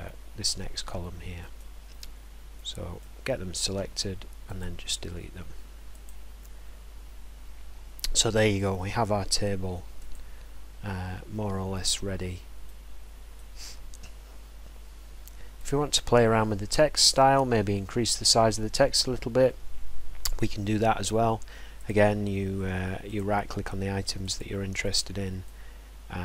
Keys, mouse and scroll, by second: 1.6 right click, 3.0 right click, 4.6 click, 6.1 click, 7.1-7.6 scroll, 7.1 middle click, 8.9 scroll, 10.1 click, 10.1 scroll, 11.9 right click, 13.4 right click, 15.7 click, 18.1 click, 21.9 click, 23.2 click, 24.4 click, 25.4 right click.